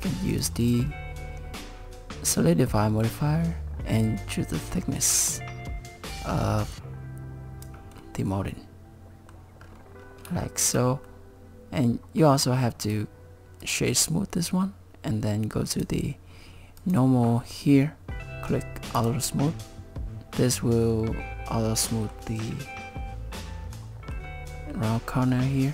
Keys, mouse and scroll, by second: 0.3 click, 0.6 click, 2.8 middle click, 4.1 click, 8.0 middle click, 9.6-10.3 scroll up 7, 10.4 shift+middle click, 12.2 middle click, 12.8 right click, 15.7 click, 16.8 click, 19.0 click, 19.5 middle click, 21.9 middle click, 23.8 middle click, 25.3 middle click.